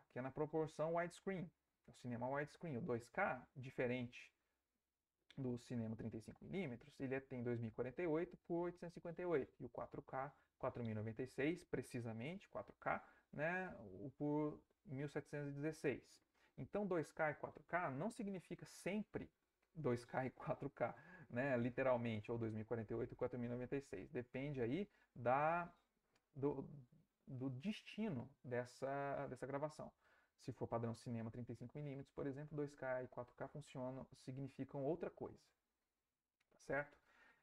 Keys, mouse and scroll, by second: 0.7 Right, 23.7 Left, 33.1 Right, 34.4 Right, 35.4 Right.